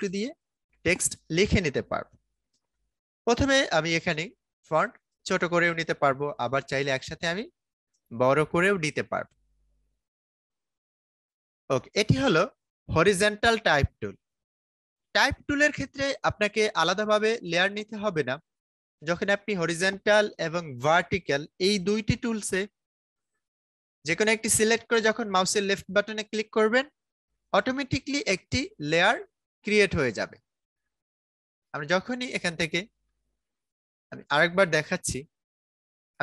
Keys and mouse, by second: 11.0 click, 20.8 right click, 23.6 click, 28.5 right click, 30.9 click.